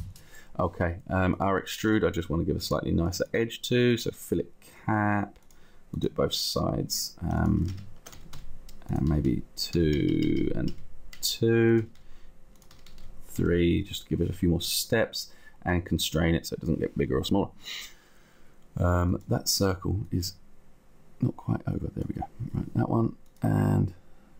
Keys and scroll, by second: 7.7 shift+Down, 8.5 Up, 10.1 Down, 11.9 Up, 13.9 Down.